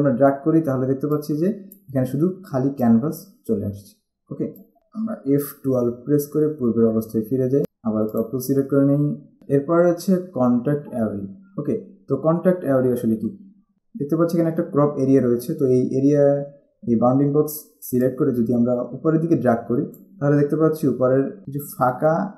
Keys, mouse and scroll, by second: 1.3 click, 2.9 click, 4.7 click, 6.0 F12, 8.3 click, 13.7 click, 18.2 click.